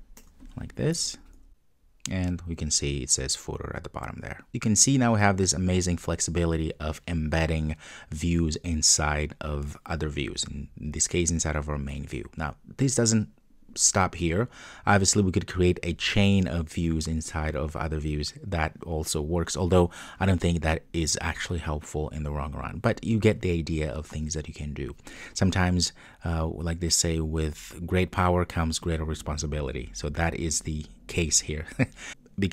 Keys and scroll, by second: 1.1 super+s.